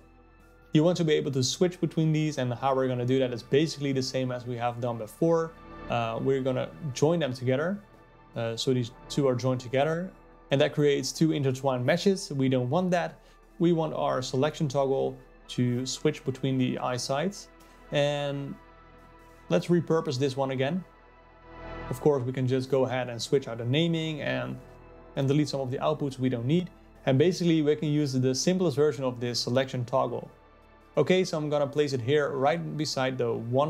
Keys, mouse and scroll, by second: 4.2-6.3 ctrl+shift+right drag, 6.3-19.0 drag, 19.0 shift+d, 22.8 click, 24.9-28.9 drag, 28.9 ctrl+z, 29.1-33.6 drag.